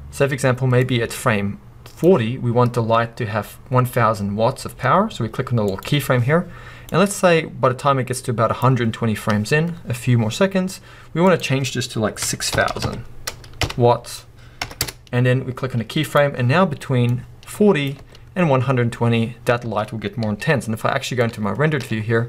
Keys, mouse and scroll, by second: 0.8-5.8 drag, 6.9-16.1 drag, 12.7 0, 14.8 Return, 17.1-22.2 drag, 19.6 space, 20.2 z.